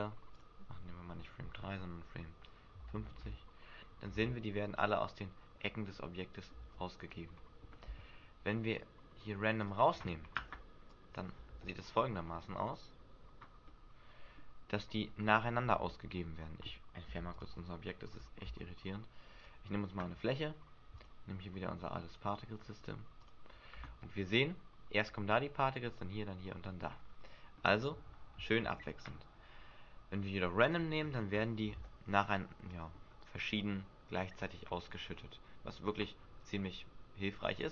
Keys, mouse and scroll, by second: 0.3 click, 4.1 alt+a, 5.3 scroll down 2, 5.9 middle click, 5.9 scroll down 3, 6.6 alt+a, 9.6 click, 10.9 click, 11.5 alt+a, 13.2 scroll up 2, 13.6 middle click, 15.2 scroll up 3, 15.8 Escape, 18.4 shift+a, 20.9 click, 22.1 click, 23.8 alt+a, 26.8-27.3 scroll down 7, 27.5 middle click, 28.6 Escape, 30.6 click, 31.3-31.8 scroll up 5, 31.8 alt+a, 32.5 middle click, 37.3 Escape.